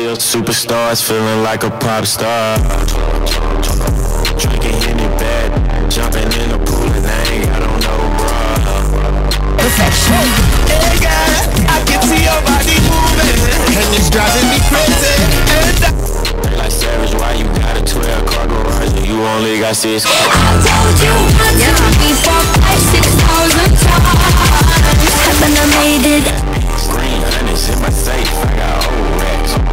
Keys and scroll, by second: 16.2 Page_Down, 26.9 Page_Down.